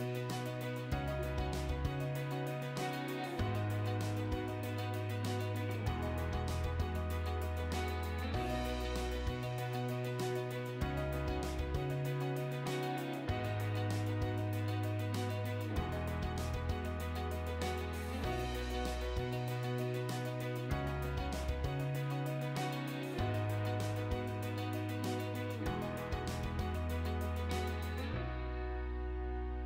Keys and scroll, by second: 7.9 Delete, 8.8 r, 9.3 space, 13.1-15.4 typing, 18.7 3, 19.0 ', 19.2 Return, 24.0-25.0 typing, 26.1 space.